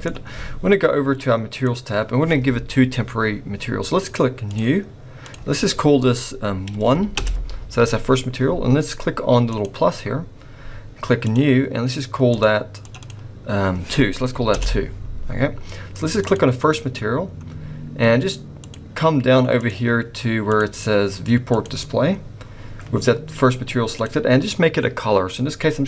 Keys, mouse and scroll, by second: 1.5 click, 4.5 click, 5.3 click, 9.5 click, 11.2 click, 12.3 click, 12.8 click, 13.0 click, 16.2 click, 18.6 click, 19.6 click, 20.5 click, 21.5 click, 23.9 click.